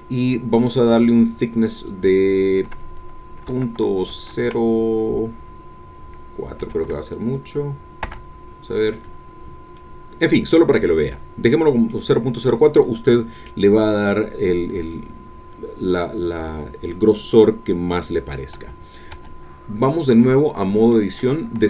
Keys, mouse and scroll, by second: 1.8 click, 3.5 KP_Decimal, 4.1 KP_0, 8.0 KP_Enter, 9.8 middle click, 11.1-19.1 middle drag, 19.2 Tab, 19.9-21.1 middle drag.